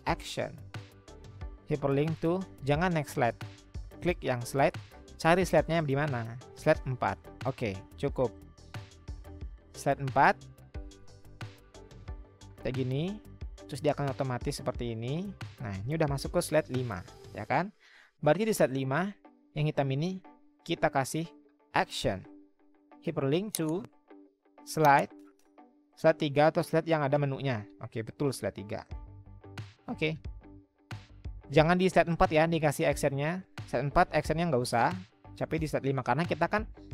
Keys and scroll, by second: 16.5 Escape, 20.4 ctrl+z.